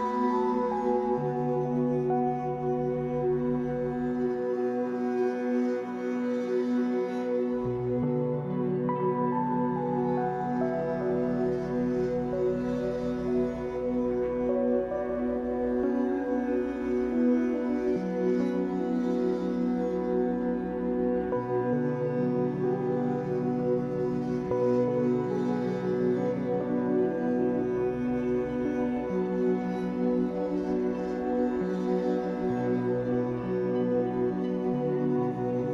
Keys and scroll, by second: 0.3 Escape, 5.8 shift+w, 7.0 Escape, 11.2 shift+w, 12.0 Escape, 15.0 shift+w, 15.9 Escape, 21.0 shift+w, 21.7 Escape, 24.9 shift+w, 25.6 Escape, 31.9 r.